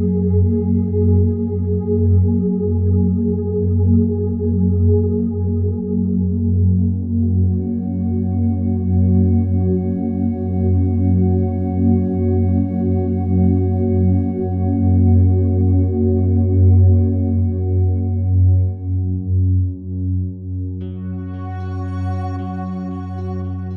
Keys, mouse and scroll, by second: 0.2 click, 0.9 m, 1.5 click, 3.0 click, 5.6 click, 7.5 click, 8.9 click, 9.5 click, 13.3 click, 14.0 click, 14.5 click, 16.2 right click, 17.3 click, 18.2 click, 18.4 click, 18.6 click, 19.0-20.2 drag, 20.6-23.0 typing.